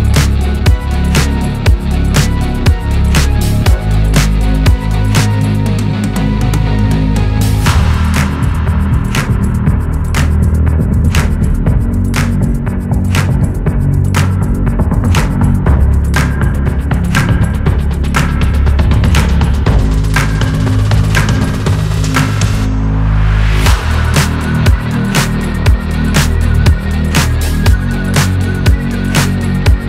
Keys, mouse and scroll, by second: 0.9 click, 1.4-1.9 scroll up 4, 2.1 click, 2.9 scroll down 1, 3.2 click, 3.4 middle click, 4.1 scroll down 5, 4.3-5.6 middle drag, 5.6 KP_1, 6.5-8.1 drag, 8.1 ctrl+z, 8.2 click, 8.4-9.1 scroll up 2, 8.5 middle click, 9.1 click, 9.9-11.4 shift+drag, 11.6 ctrl+p, 12.6 click, 12.7 scroll down 1, 12.9 click, 13.3 g, 13.8 click, 14.1 g, 14.8 click, 14.9 g, 15.5 KP_1, 15.6 click, 15.8 scroll down 2, 16.1 click, 17.7 click, 18.1 scroll down 1, 18.2 middle click, 18.3 scroll up 1, 18.6 shift+a, 19.6-20.3 scroll up 2, 20.7-22.3 drag, 22.3-23.2 scroll up 2, 23.2 right click, 24.0 KP_1, 24.5 shift+middle click, 25.2-25.9 scroll down 5, 25.9-27.6 drag, 27.6 middle click, 28.0 KP_7, 28.2 scroll up 1, 28.5 click, 28.8 shift+a.